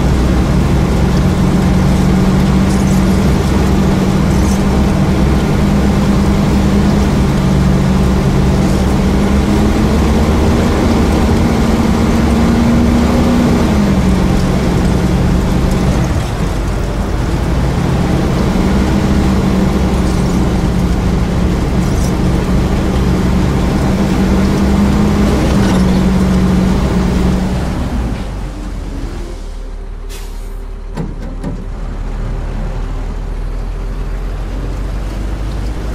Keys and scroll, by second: 2.6 a, 3.3 a, 7.7 d, 8.5 a, 11.2 a, 12.7 d, 13.5 d, 14.0 d, 15.8 q, 16.7 a, 23.0 a, 23.9 d, 24.2 a, 25.9 a, 27.5 s, 30.9 q, 31.7 w, 34.8 d.